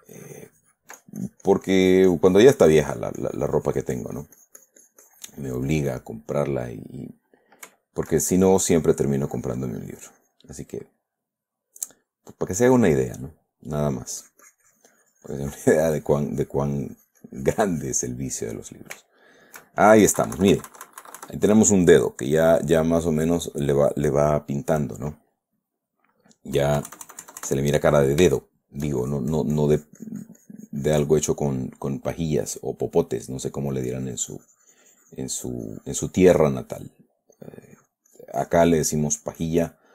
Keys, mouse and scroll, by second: 6.4 middle click, 8.2 shift+middle click, 9.1-11.4 shift+drag, 11.6-13.2 middle drag, 13.3 click, 14.6-18.5 drag, 18.5 middle click, 19.5 shift+click, 20.6 KP_Subtract, 21.8-25.1 drag, 25.2 click, 26.0 click, 27.0 KP_Add, 28.7 shift+middle click, 29.4-31.7 shift+drag, 31.8 shift+middle click, 32.6 middle click, 33.2 middle click, 34.2-36.8 drag, 36.8 middle click, 37.8 click, 39.4 click.